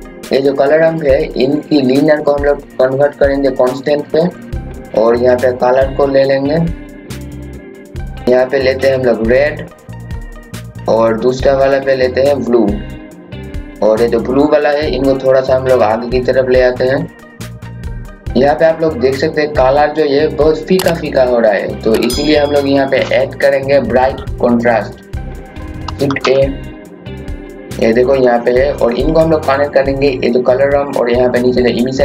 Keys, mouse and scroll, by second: 19.1 scroll up 1, 21.1 scroll down 1, 22.0-22.8 scroll up 1, 26.1-27.7 typing, 26.7 click, 28.2-32.0 drag.